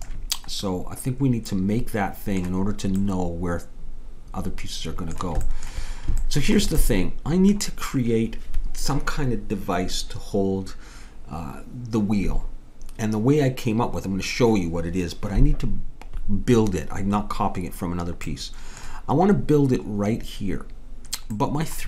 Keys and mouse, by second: 0.7 middle click.